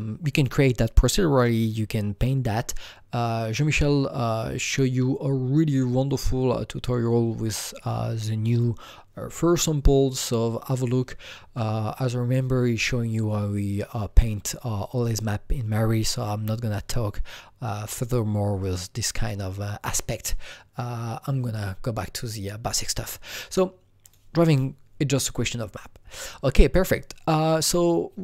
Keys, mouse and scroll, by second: 8.5 click, 24.1 click.